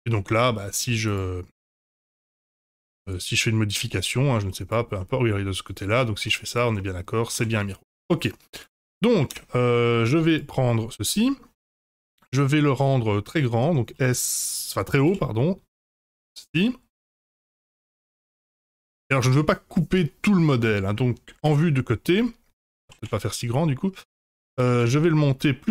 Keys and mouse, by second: 0.2 Tab, 1.0 Tab, 1.1 click, 1.6 Tab, 1.9 3, 2.8 Tab, 3.0 click, 3.5 middle drag, 3.8 Tab, 4.1 middle click, 4.3 3, 4.5 click, 5.0 middle click, 5.7 click, 6.2 e, 6.7 middle click, 7.3 ctrl+z, 8.6 click, 9.5 Tab, 9.7 middle drag, 10.3 click, 10.7-11.3 middle drag, 12.8 drag, 13.0-13.6 middle drag, 13.9 s, 16.9-20.9 middle drag, 21.4 KP_1, 22.8 s, 24.5 g.